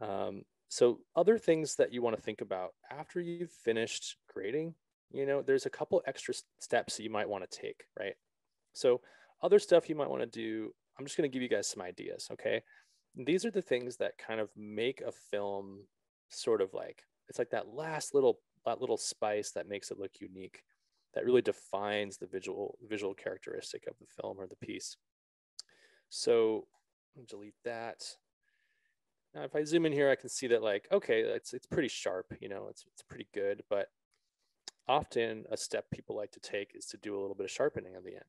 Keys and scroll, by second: 27.7 BackSpace, 36.8 s.